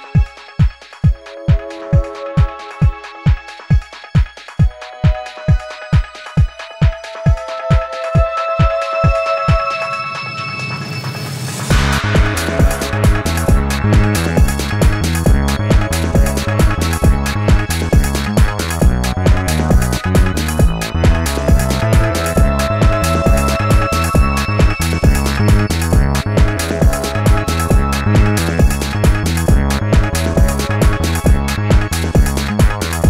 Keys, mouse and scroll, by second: 10.6 shift+click, 14.3 ctrl+z, 15.0 alt+scroll down 1, 15.2 space, 15.9 alt+scroll up 1, 16.1 space, 17.1 alt+scroll up 1, 17.4 space, 21.1 alt+scroll up 1, 21.4 space, 23.4 alt+scroll up 1, 23.7 space, 25.6 space, 27.2 ctrl+z, 28.9 ctrl+z.